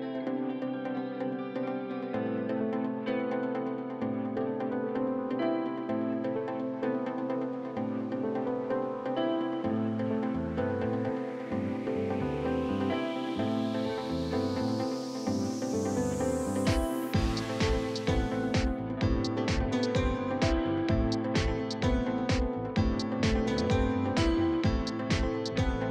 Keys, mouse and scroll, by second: 0.3 click, 0.8 shift+a, 1.9-5.4 drag, 5.4 s, 7.0-8.1 scroll up 8, 7.2 shift+middle click, 8.1 click, 8.3-10.1 middle drag, 10.1 r, 11.3 middle click, 11.7 click, 12.3 middle click, 13.2 click, 13.6 middle click, 14.1 click, 14.6 middle click, 15.1 scroll up 2, 15.2 middle click, 15.6 r, 16.2-17.2 middle drag, 17.2 click, 17.5 middle click, 18.0 scroll up 1, 18.2-19.2 middle drag, 20.0 middle click, 20.3-22.1 drag, 22.1 middle click, 22.3-23.5 drag, 23.5 middle click, 24.3 e, 25.3-25.9 middle drag.